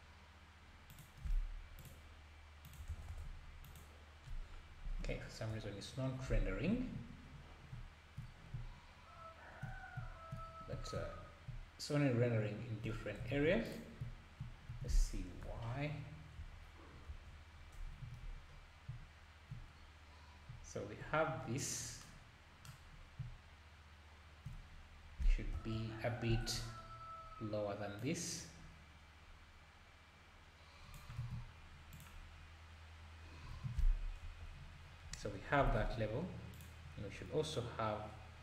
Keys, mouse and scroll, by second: 0.9-1.9 drag, 2.6 click, 3.1 KP_0, 3.7 KP_0, 5.5 KP_Divide, 7.1-7.7 scroll up 6, 8.2-8.5 scroll down 2, 10.4 scroll, 10.7 scroll down 4, 11.1-11.5 scroll up 3, 12.9-13.3 scroll down 1, 13.3 ctrl+a, 15.5 KP_Divide, 16.4 KP_0, 16.9 scroll down 3, 17.1 KP_0, 18.2-18.9 scroll up 5, 19.7-20.1 scroll down 2, 20.1-20.4 scroll up 1, 21.6 click, 22.9 scroll up 2, 24.8-25.2 scroll down 1, 25.5 KP_0, 26.3 scroll up 3, 28.0 scroll up 5, 28.0 click, 31.2 alt+a, 31.9 click, 33.6 alt+a, 34.2 KP_0, 34.8 scroll up 2, 36.5 click, 36.5 scroll up 1.